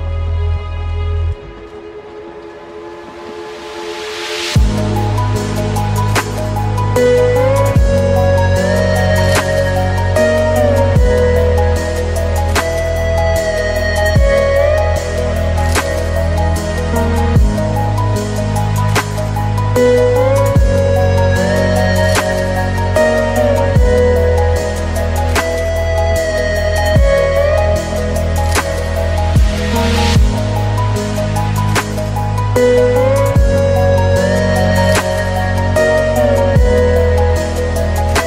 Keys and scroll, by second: 5.6 ctrl+t, 19.5 ctrl+t, 31.3 ctrl+z.